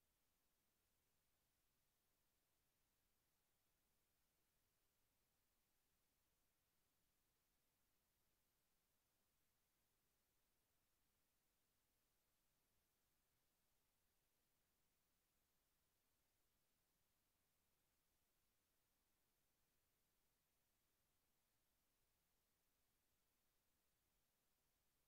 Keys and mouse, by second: 0.4-2.7 typing, 4.1 Tab, 5.4-7.3 drag, 7.3 middle click, 9.1-11.8 middle drag, 10.0-11.8 drag.